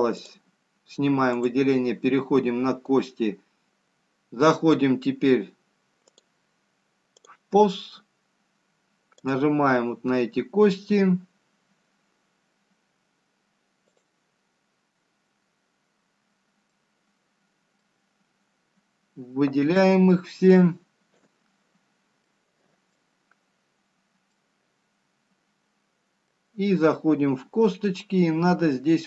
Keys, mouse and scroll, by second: 2.3 click, 8.0 click, 16.6 shift+click, 18.6-19.5 scroll down 2, 19.5 middle click, 24.1 b, 26.3 middle click.